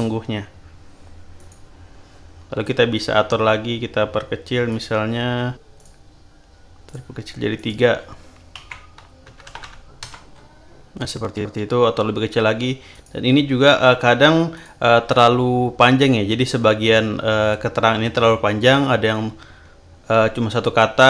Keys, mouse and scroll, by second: 1.3 click, 4.6 click, 5.8 click, 6.8 click, 7.5 click, 8.5 Left, 9.2 BackSpace, 10.0 Return, 12.9 click, 14.5 click, 15.1 click, 19.2-19.8 scroll down 3.